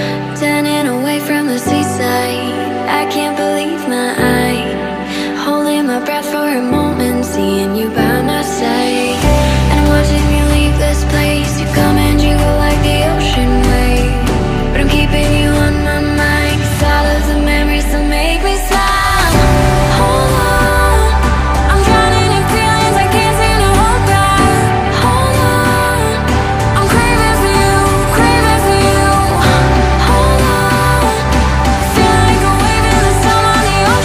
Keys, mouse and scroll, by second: 5.7 Delete, 7.6 Delete, 8.7 Delete, 9.8 Delete, 11.4 Delete, 12.5 double click, 18.1 ctrl+z, 20.3 ctrl+click, 22.5 ctrl+click, 23.0 ctrl+click, 24.7 ctrl+click, 25.6 ctrl+click, 26.3 ctrl+click, 26.8 right click, 29.6 Delete, 31.5 ctrl+v.